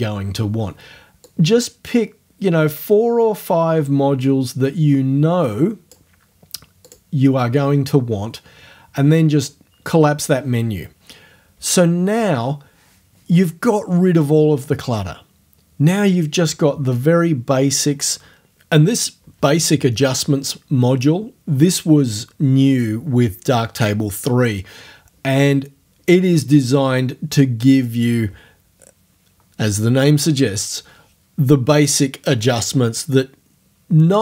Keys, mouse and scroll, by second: 1.3-6.1 drag, 6.9 click, 9.4 click.